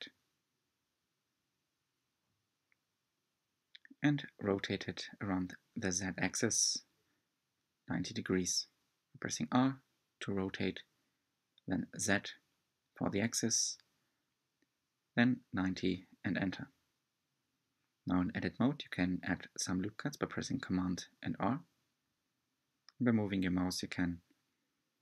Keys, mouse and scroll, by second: 2.6-4.1 middle drag, 4.1-4.4 scroll up 1, 4.4-7.3 middle drag, 7.3 shift+d, 13.2-15.6 middle drag, 15.6-16.2 scroll up 2, 16.2-19.0 middle drag, 19.0 Tab, 20.7 r.